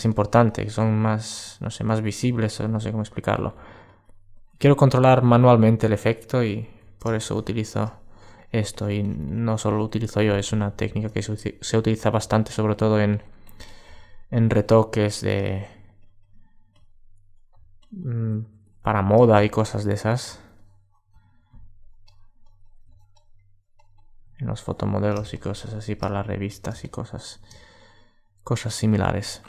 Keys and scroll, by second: 10.3 alt+super+z.